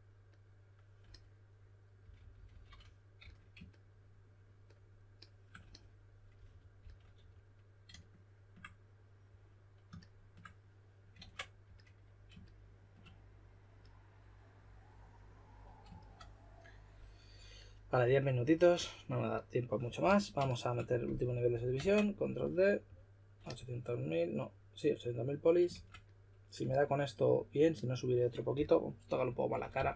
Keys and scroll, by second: 1.9-3.1 typing, 6.2-7.6 typing, 11.1 super+z, 11.6 s, 18.7 s, 19.9 s, 21.7 super+d, 25.6 shift+s, 28.5-29.9 typing.